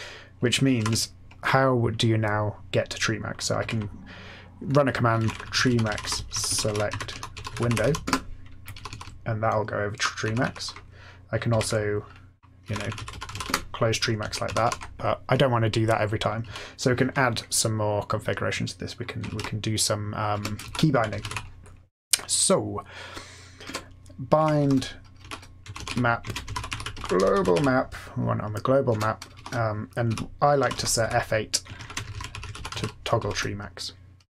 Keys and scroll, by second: 0.7 ctrl+g, 3.5 x, 4.8-8.3 typing, 8.7 Up, 8.8 Up, 9.0 Up, 9.5 Up, 9.7-11.5 Up, 11.5 alt+x, 12.3-13.8 typing, 14.2 Down, 14.4 Up, 14.6 Up, 16.4 Down, 19.3 ctrl+e, 20.3 Return, 20.3-21.7 typing, 23.6 Return, 24.3-28.0 typing, 28.8 Return, 29.0-33.6 typing.